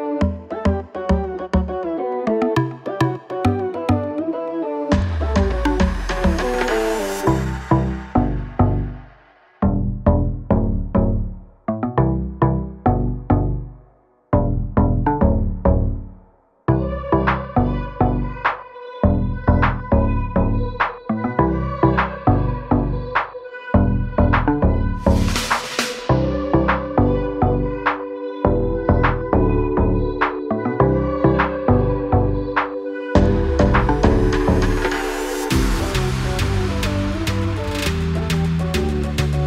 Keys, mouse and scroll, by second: 4.2 i, 5.1 click, 7.7 click, 10.4 i, 10.9 click, 20.1 click, 27.5 a, 27.7 click, 29.1 i, 30.2 click, 32.6 click.